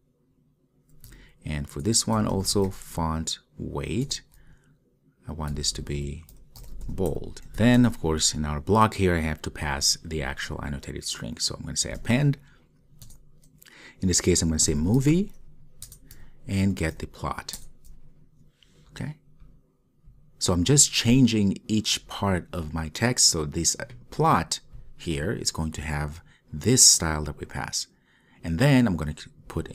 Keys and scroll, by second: 4.2 Return, 13.2 Return, 16.9 Return.